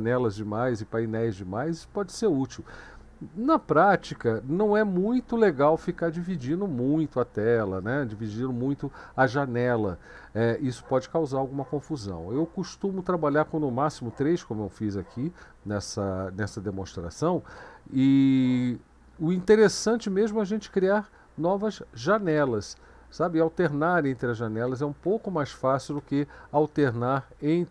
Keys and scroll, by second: 19.0 Up, 19.2 Up, 19.4 Up, 22.7 Down, 23.2 Up, 23.6 Down, 23.8 Down, 24.0 Down, 24.3 Down, 25.1 Down, 25.4 Down, 25.9 Down, 26.6 Up, 26.8 Up, 27.3 Down.